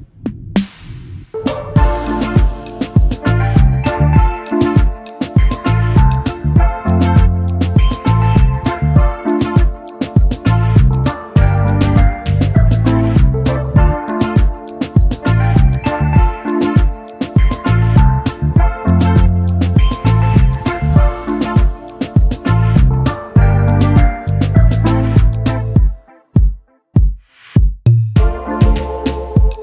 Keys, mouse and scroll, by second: 1.1 typing, 2.7 typing, 3.5 alt+scroll down 1, 5.1-5.4 alt+scroll up 1, 5.7 space, 5.7 double click, 6.7 space, 8.4 typing, 8.8 double click, 10.0 double click, 12.1 Delete, 12.6 Delete, 13.7 double click, 14.2 alt+scroll down 1, 14.7 double click, 16.1 alt+scroll up 1, 16.8 space, 25.4 x, 28.3 double click.